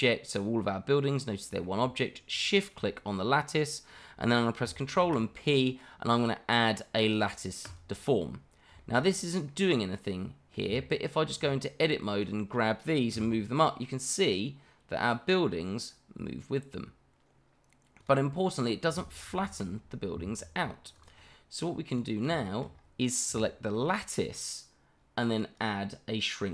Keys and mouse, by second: 0.6-1.6 middle drag, 2.3 shift+click, 4.9 ctrl+p, 8.8 shift+middle drag, 9.5-10.5 middle drag, 10.7 Tab, 11.8 click, 13.1 g, 18.0 click, 19.4 ctrl+z, 20.1 Tab, 20.9 click, 21.2-21.6 middle drag, 21.9 click, 22.4 shift+middle drag, 25.5-26.5 drag.